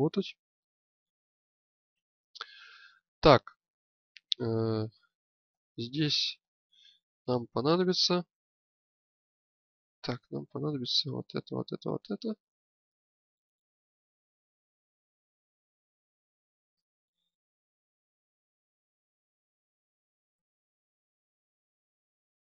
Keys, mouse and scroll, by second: 4.9-6.6 alt+middle drag, 10.6 click, 12.4 click, 15.0 z.